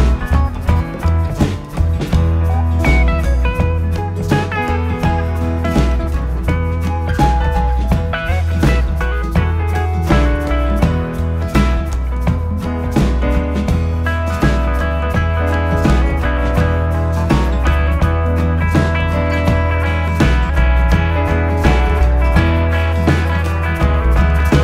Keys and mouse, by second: 0.5 s, 2.8 click, 4.0 shift+middle click, 7.5 alt+click, 10.0 s, 14.5 click, 18.0 alt+click, 20.1 s, 21.2 click.